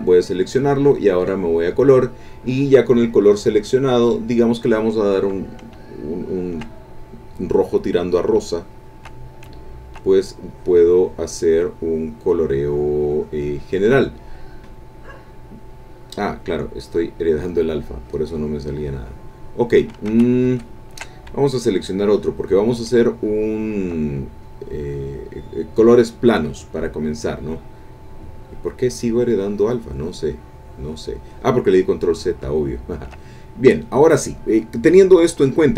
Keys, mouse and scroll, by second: 1.0 click, 4.0 click, 5.9 shift+click, 6.8 shift+click, 8.4 shift+click, 9.3 shift+click, 10.2-10.5 shift+scroll up 1, 10.5-14.1 drag, 16.8 click, 18.0-19.9 drag, 20.1 ctrl+z, 22.1 click, 23.0-24.1 shift+drag, 24.4-25.6 drag, 28.1 click, 29.0-31.7 drag, 32.5 shift+click.